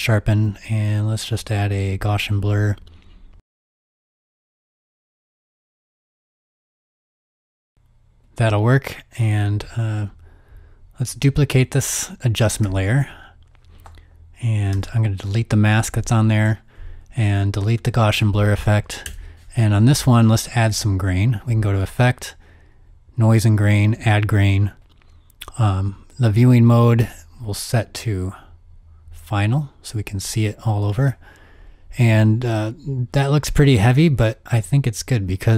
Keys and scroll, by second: 3.5 KP_0, 12.6 super+d, 13.9 super+d, 14.7 m, 16.3 m, 17.6 BackSpace, 19.2 BackSpace.